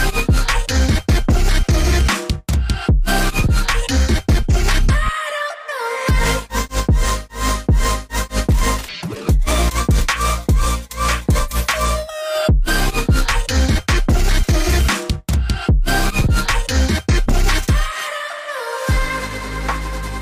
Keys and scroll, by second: 1.4 ctrl+3, 1.9 g, 3.4 v, 3.8 ctrl+alt+3, 7.7 ctrl+shift+], 14.7 ctrl+], 14.9 ctrl+].